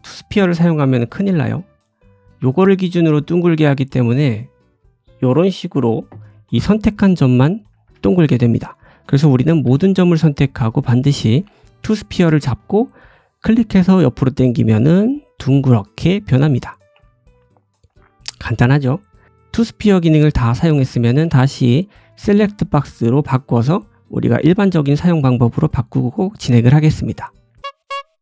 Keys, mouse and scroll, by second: 0.0 click, 2.9 click, 4.5 click, 4.6 click, 6.0 scroll up 1, 6.5 middle click, 7.8 ctrl+z, 8.4 middle click, 9.5 a, 10.7 click, 12.4 click, 17.5 click, 17.8 middle click, 18.5 Tab, 18.5 middle click, 19.2-22.9 right drag, 22.9 click, 23.6 middle click, 24.4 click, 25.2-26.9 middle drag, 26.9 click.